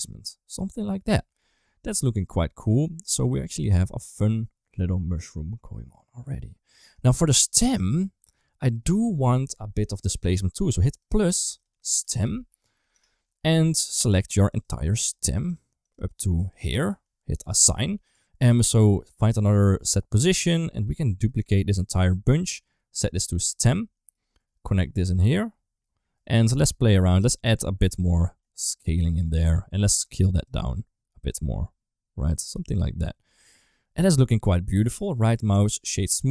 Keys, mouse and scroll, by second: 0.1 middle click, 1.7 ctrl+s, 1.9 shift+middle click, 2.1-6.7 middle drag, 6.9 shift+middle click, 7.5 middle click, 7.9 shift+middle click, 10.9 click, 11.6-12.8 drag, 13.3 Tab, 13.9 Tab, 14.2 3, 14.5 click, 14.9 shift+click, 15.4 shift+click, 15.8 shift+click, 16.2 shift+click, 16.4 shift+click, 18.3 middle click, 18.7 click, 19.7 shift+d, 20.4 middle click, 20.8 click, 21.5 shift+click, 23.0 click, 24.4 middle click, 25.1 click, 26.1 middle click, 27.2-29.7 shift+drag, 30.3-32.4 shift+drag, 34.8 right click.